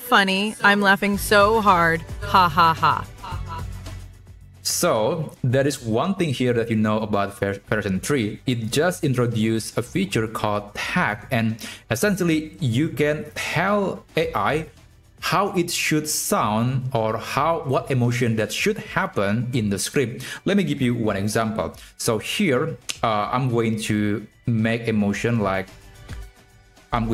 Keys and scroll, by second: 26.8 Left.